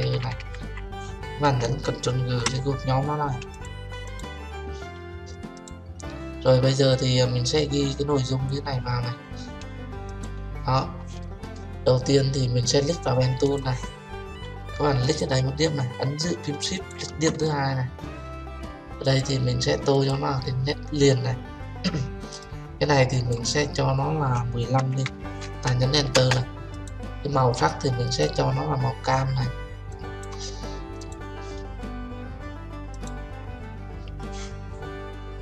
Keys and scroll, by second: 2.2 ctrl+g, 26.1 Return.